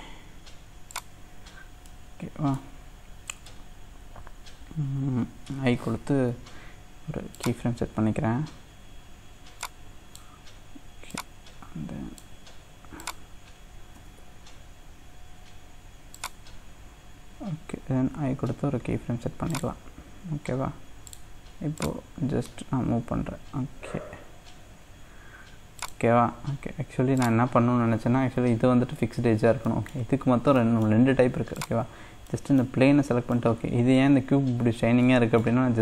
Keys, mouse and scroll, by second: 1.5 scroll down 2, 1.8-5.0 middle drag, 9.6-13.9 drag, 13.9 g, 18.5 i, 21.1-24.8 drag, 25.8-29.3 drag, 29.3-29.6 scroll up 1, 29.6 middle click, 30.3 scroll down 1, 30.5 middle click, 31.1-31.6 scroll up 2, 31.6 click, 32.0-32.3 scroll down 2, 32.3-34.2 middle drag, 34.2-35.1 scroll up 3, 35.1-35.8 middle drag.